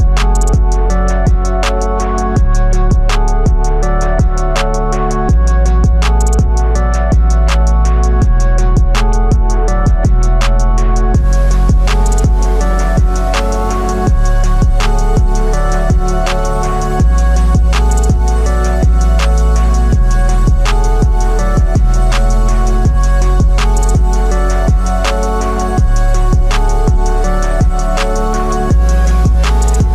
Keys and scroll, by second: 0.1 ], 0.6 ].